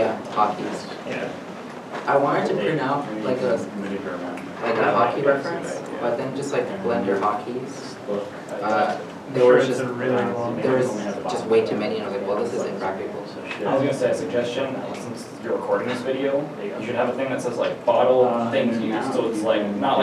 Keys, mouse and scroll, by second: 4.9 alt+Tab, 6.8-7.6 typing, 9.2 Return, 12.0 Return, 12.3 scroll down 1, 19.4 click.